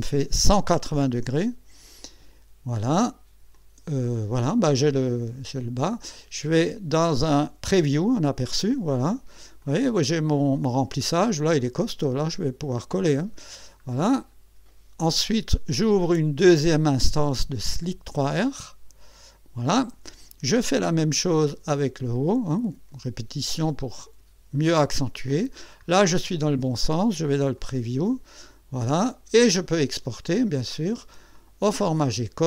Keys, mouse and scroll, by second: 2.0 click, 3.5-6.3 drag, 7.8 click, 8.8-9.3 scroll up 1, 9.6-10.8 drag, 11.0 scroll up 1, 11.6-13.8 drag, 13.8-14.8 scroll down 3, 16.4 click, 18.1 click, 20.6 click, 22.1-24.4 drag, 25.6 scroll up 1, 26.0 scroll down 1, 27.5 click, 28.4-30.1 drag, 31.3 click.